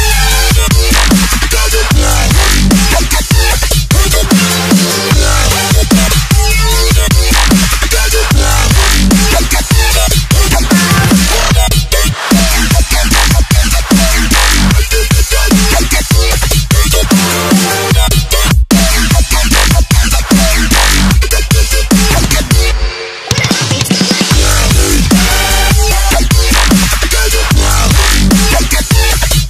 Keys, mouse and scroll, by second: 0.0 click, 1.5 scroll up 1, 3.0 click, 4.8 Delete, 6.5-6.9 scroll down 1, 8.2 scroll up 1, 8.8 scroll up 1, 10.5 scroll down 1, 11.1 scroll up 1, 12.8 click, 17.6 space, 18.5 space, 19.5 click, 23.1 click, 24.8 Return, 25.0 Up, 27.4 alt+Num_Lock, 27.4 alt+scroll down 1, 27.8 alt+scroll up 1, 28.1 alt+scroll down 1, 28.2 alt+click, 29.1-29.4 alt+scroll down 1.